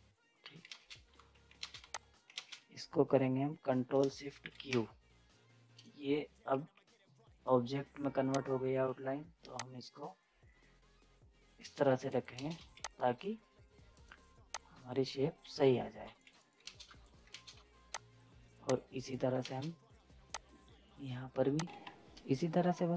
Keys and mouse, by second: 0.7 space, 1.1 z, 1.6 ctrl+space, 1.8 z, 1.9 click, 2.3 ctrl+space, 4.5 ctrl+shift+q, 6.5 F10, 8.3-11.9 drag, 11.9 z, 12.0 right click, 12.0 right click, 12.3 ctrl+space, 12.6 z, 12.8 click, 13.9 right click, 14.5-16.0 drag, 16.0 z, 16.1 right click, 16.6 ctrl+space, 16.8 z, 17.0 right click, 17.3 ctrl+space, 17.6 z, 17.9 click, 19.4 ctrl+space, 20.3 click, 21.6 ctrl+space.